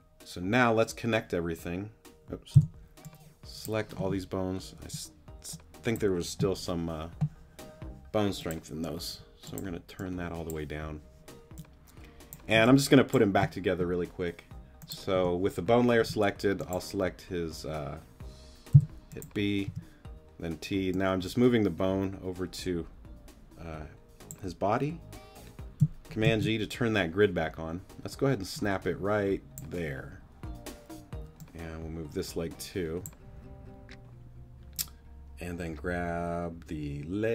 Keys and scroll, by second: 2.5 b, 9.1 w, 12.5 space, 15.1 t, 18.7 b, 19.7 t, 26.2 super+g.